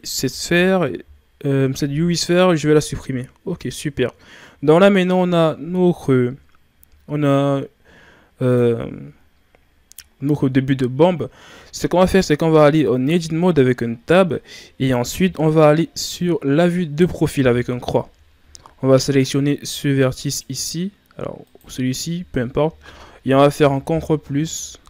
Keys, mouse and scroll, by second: 1.0 Delete, 8.4 right click, 9.7-10.2 scroll up 1, 10.2 ctrl+scroll down 1, 12.8 Tab, 13.8 Tab, 17.3 KP_3, 17.7 3, 18.3-18.7 shift+scroll down 4, 18.7-20.2 scroll up 2, 20.2 right click, 21.4 right click, 23.3 ctrl+KP_Add, 23.8 ctrl+KP_Add, 24.3 ctrl++.